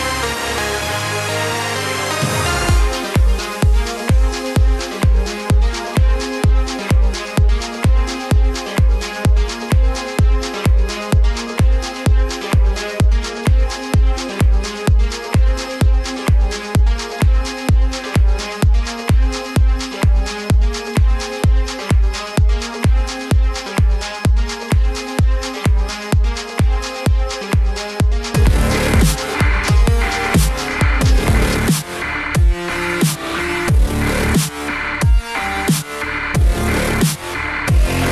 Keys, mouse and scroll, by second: 3.0 ctrl+KP_Add, 5.7 g, 13.6 click, 14.8 z, 17.4 b, 19.5-26.1 drag, 26.1 middle click, 26.9-29.9 drag, 33.4-35.8 middle drag, 35.8 KP_1.